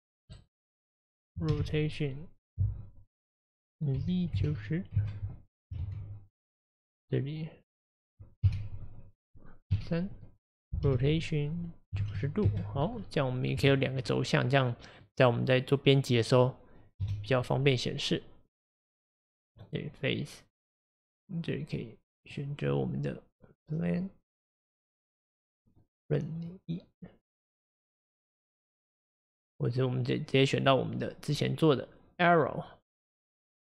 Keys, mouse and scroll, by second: 1.5 r, 5.8 ctrl+z, 8.5 KP_1, 9.7 KP_3, 10.9 r, 13.0 middle click, 13.6 Tab, 14.1-17.0 middle drag, 17.0 KP_Divide, 17.7-18.6 scroll down 1, 18.7 click, 19.6 click, 23.9-33.5 drag.